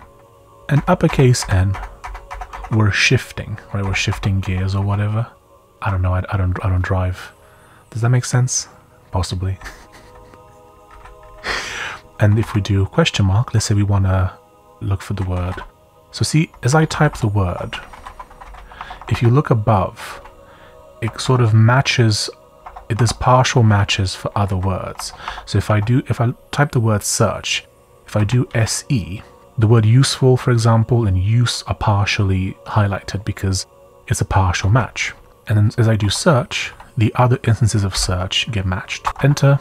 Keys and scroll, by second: 0.3 shift+n, 0.7 shift+n, 1.0 shift+n, 3.8 shift+n, 4.1 shift+n, 4.4 shift+n, 9.6-12.4 typing, 14.9-21.2 typing, 22.6-25.6 typing, 26.8-28.5 typing, 31.7-32.5 typing, 35.3-36.7 typing, 37.9-39.6 typing.